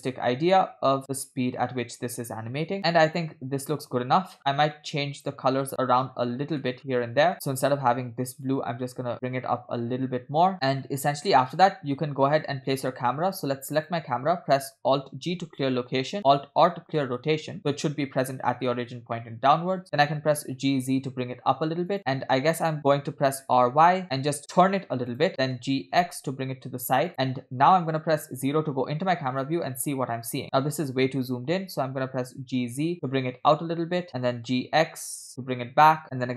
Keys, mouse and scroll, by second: 4.1 space, 4.5 scroll down 4, 4.8-6.0 middle drag, 6.2 scroll up 2, 6.7 middle click, 6.8 scroll up 2, 7.4 click, 7.7 scroll up 1, 10.6 scroll down 4, 10.6 space, 10.9-13.1 middle drag, 13.8 click, 16.2 alt+g, 17.3 alt+r, 17.6 middle click, 19.1 scroll down 3, 19.2 middle click, 20.2 g, 23.5 r, 25.6 g, 28.4 KP_0, 32.0 g, 34.4 g.